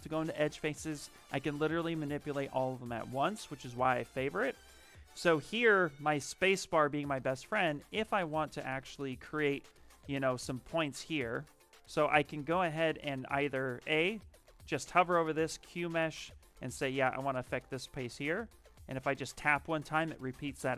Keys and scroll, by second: 4.0 space, 14.2 space.